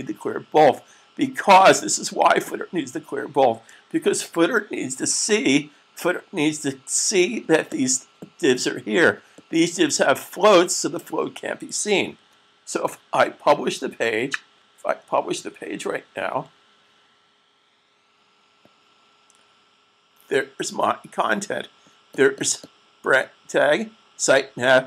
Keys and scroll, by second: 3.9 super+s, 15.8 super+fn+F12.